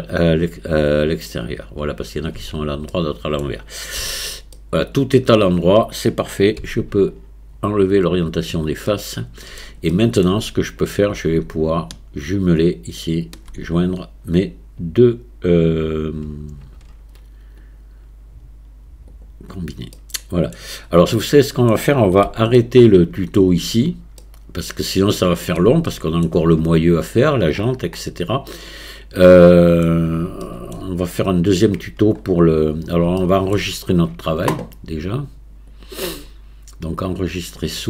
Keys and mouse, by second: 2.4 Tab, 3.0 click, 4.0 a, 4.5-5.3 drag, 6.6 q, 8.9-9.6 drag, 9.9 shift+click, 10.8-11.3 drag, 13.0 shift+click, 17.6-19.4 drag, 20.0-20.5 middle drag, 21.2-21.7 drag, 21.2-21.7 middle drag, 22.3-23.4 shift+middle drag, 24.2-25.6 middle drag, 25.9-26.3 shift+middle drag, 28.0-29.9 middle drag, 30.4-30.7 shift+middle drag, 31.3 click, 33.2-33.6 shift+middle drag, 37.3 click.